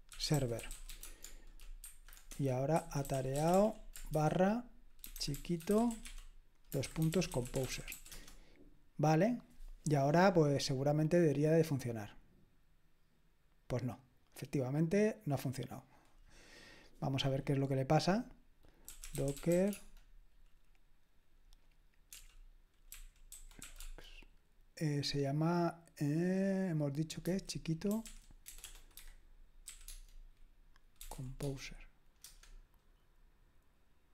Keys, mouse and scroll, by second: 0.0-9.3 typing, 14.2 click, 18.6-20.0 typing, 22.7-24.1 typing, 27.7-29.7 typing, 29.9 Tab, 31.0-32.7 typing, 31.4 Tab.